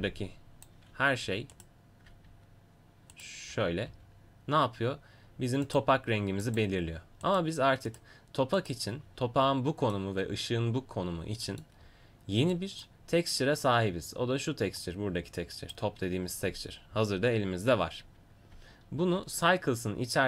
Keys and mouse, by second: 2.2-6.4 drag, 3.9 g, 7.2-19.0 drag, 19.0 shift+a.